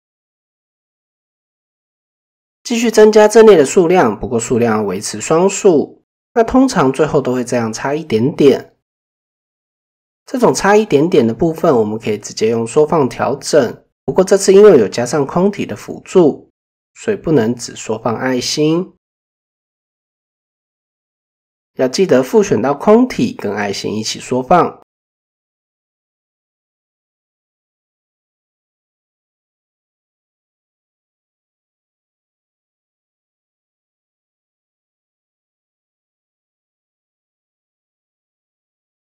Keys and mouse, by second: 1.8 click, 2.4 click, 3.9-4.4 middle drag, 5.0-5.7 middle drag, 7.0-7.5 middle drag, 8.8 KP_7, 9.7 shift+middle drag, 22.4-22.9 middle drag, 23.2 middle drag, 23.7-24.0 middle drag, 24.4-24.7 middle drag, 24.8-25.1 middle drag, 25.7 middle click, 32.9-33.6 middle drag, 33.8 shift+middle click, 34.1-35.3 middle drag, 35.6 shift+middle drag.